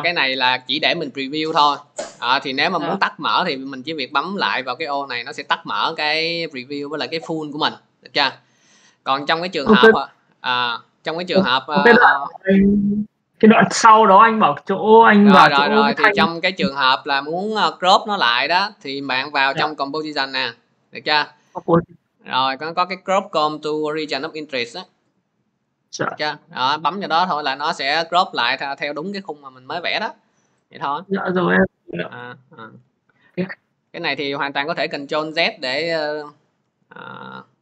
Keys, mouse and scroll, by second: 0.0 click, 0.9 click, 2.9 click, 4.9 click, 6.3 click, 9.7 click, 12.3 click, 19.8 click, 25.9 click, 32.0 click, 33.3 ctrl+z, 37.2-37.6 scroll.